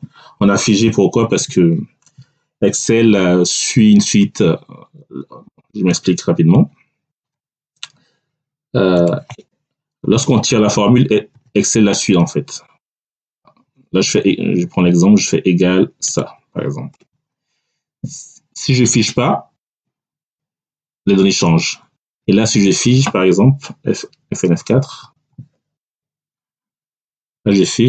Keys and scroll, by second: 1.2 Tab, 9.9 Down, 11.2 =, 12.7 BackSpace, 13.1 =, 16.8 Return, 24.8 F4, 25.7 Return.